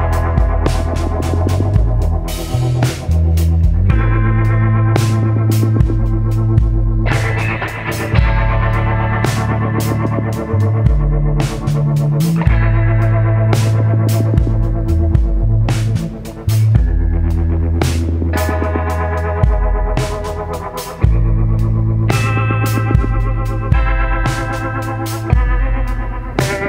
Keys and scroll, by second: 1.1 ctrl+z, 5.6 ctrl+z, 5.9 ctrl+z, 11.3 ctrl+z, 18.9 ctrl+z.